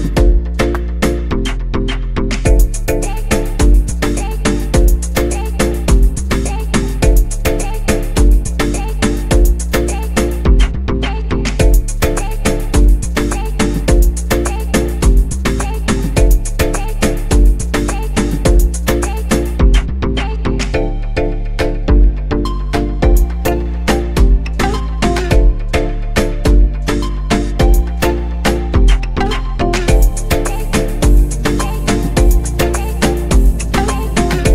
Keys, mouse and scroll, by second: 0.3 click, 2.0-4.2 drag, 4.2-4.7 scroll up 1, 5.0-7.5 middle drag, 7.5 KP_0, 10.0-13.0 drag, 19.7-20.4 scroll down 2, 21.1 click, 22.0 drag, 25.9 scroll down 3, 27.3 KP_1, 28.0-29.2 scroll down 10, 30.9 g.